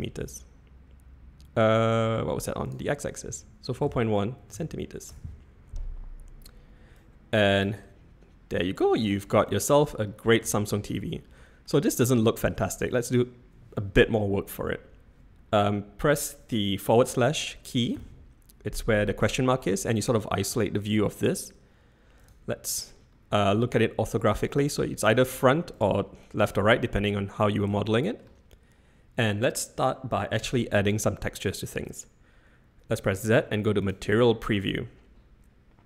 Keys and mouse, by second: 2.6-6.0 drag, 6.9 click, 7.8-8.5 middle drag, 11.7-12.5 middle drag, 18.0 KP_Divide, 25.0 click, 27.8-28.2 shift+middle drag, 33.1 z.